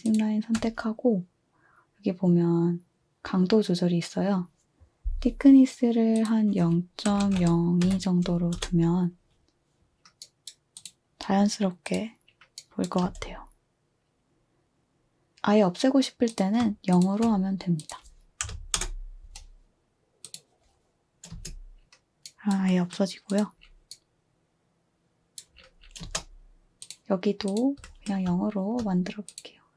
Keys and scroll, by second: 6.8-7.9 typing, 8.6 Return, 9.9 typing, 13.0-14.4 typing, 18.4-20.1 typing, 21.3 space, 26.0 space.